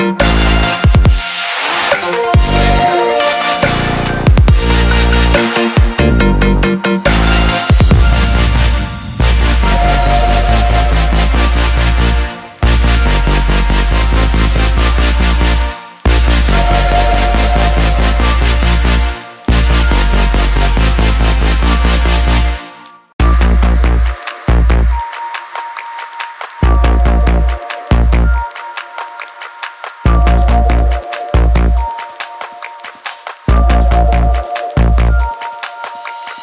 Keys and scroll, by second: 25.9 ctrl+z, 29.9 ctrl+d.